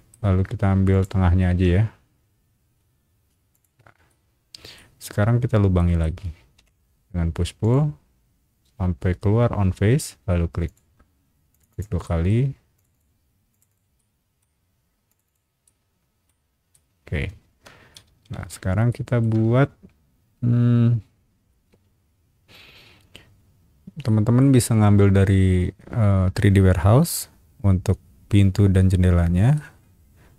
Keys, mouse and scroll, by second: 0.9 click, 3.5 shift+click, 4.1 middle click, 5.3 scroll down 1, 5.8 shift+middle click, 6.5 shift+p, 7.6 click, 10.6 click, 11.5 click, 11.7 click, 12.0 middle click, 12.7 click, 12.9 click, 13.5 click, 13.7 click, 14.0 middle click, 15.1 click, 15.2 click, 15.6 middle click, 16.7-17.9 middle drag, 18.0 space, 18.3 Escape, 18.9 shift+middle click, 24.0 middle click, 29.5-30.3 middle drag.